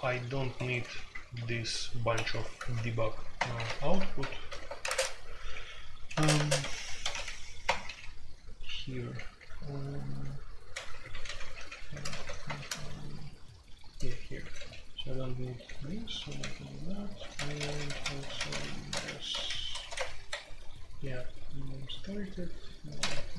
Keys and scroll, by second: 0.0-21.5 typing, 0.5 Escape, 3.3 Return, 3.7 super+k, 4.8 super+k, 5.0 Tab, 7.6 Return, 23.0-23.3 typing.